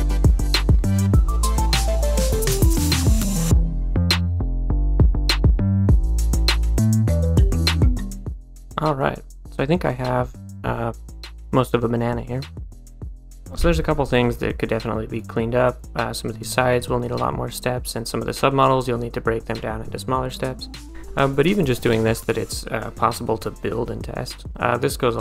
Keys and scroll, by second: 3.5-6.3 typing, 8.0 a, 9.4 d.